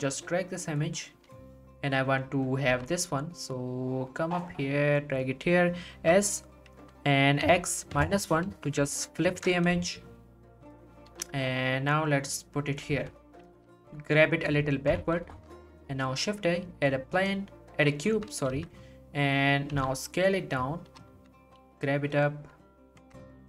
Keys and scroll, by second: 2.6 1, 5.0 g, 5.9 s, 7.4 x, 8.5 -, 8.8 1, 9.2 Return, 11.1 g, 13.5 g, 13.7 y, 14.9 1, 15.3 shift+a, 18.1 z, 18.5 s, 20.9 g, 21.1 z, 23.0 Tab.